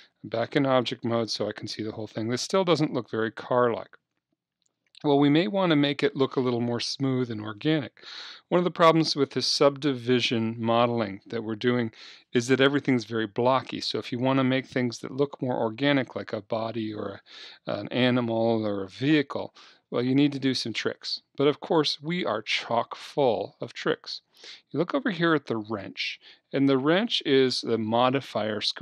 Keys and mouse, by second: 2.4-4.0 middle drag, 25.5-27.4 drag.